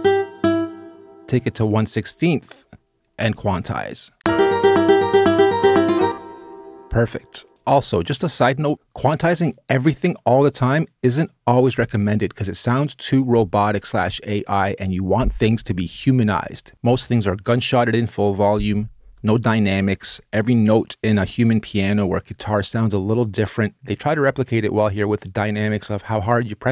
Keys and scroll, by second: 2.9 q, 3.9 space, 5.8 space.